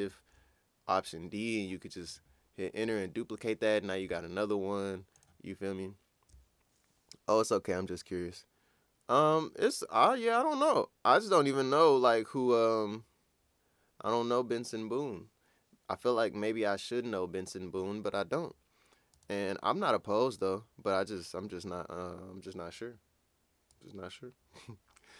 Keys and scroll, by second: 2.0 Return.